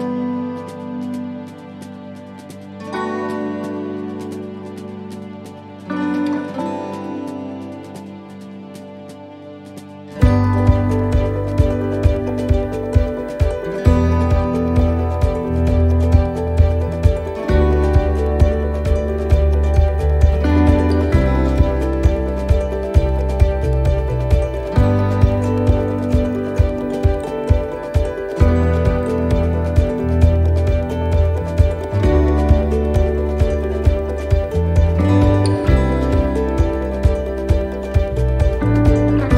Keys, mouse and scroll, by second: 0.2 shift+d, 1.7 click, 6.4 shift+d, 7.5 click, 14.8 click, 16.6 shift+d, 17.9 click, 22.2 shift+d, 23.4 click, 28.0 shift+d, 29.1 click, 32.2 right click, 32.9 right click, 33.7 l, 34.8 shift+d, 35.9 click.